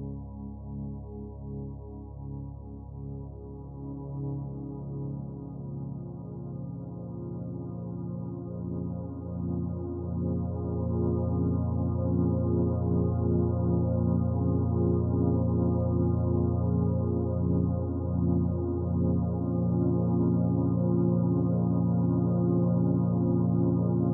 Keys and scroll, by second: 9.8 i.